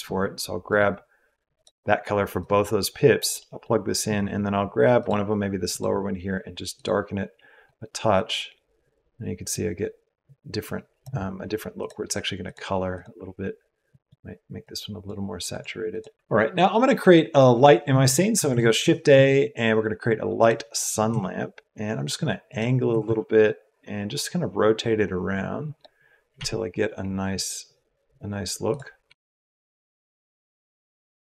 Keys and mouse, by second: 2.3-3.2 drag, 3.4 click, 3.4 right click, 11.7 click, 12.4 click, 18.4 shift+a, 21.0 r, 22.8 r, 26.3 r, 29.0 r, 29.1-31.3 drag.